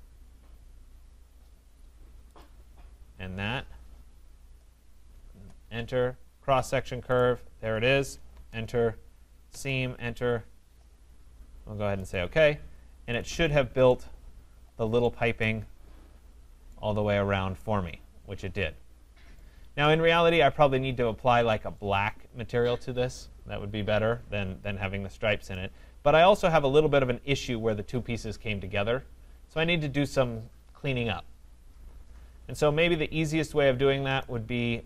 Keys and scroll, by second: 5.3 Return.